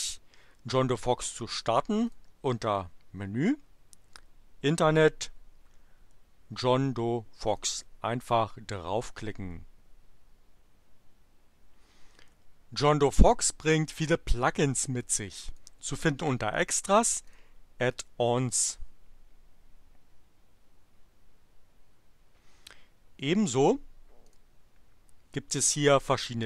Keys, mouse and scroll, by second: 1.9 click, 7.5 click, 15.5 click, 17.3 click, 23.2 click, 24.3 click.